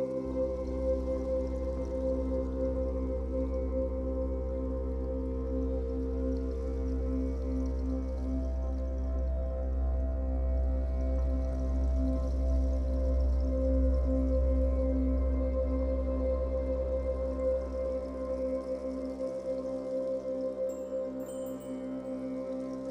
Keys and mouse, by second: 0.0 Tab, 0.9 a, 2.7-9.2 ctrl+alt+drag, 7.2 typing, 8.8-9.7 typing, 11.6-12.7 typing, 14.9-21.2 typing.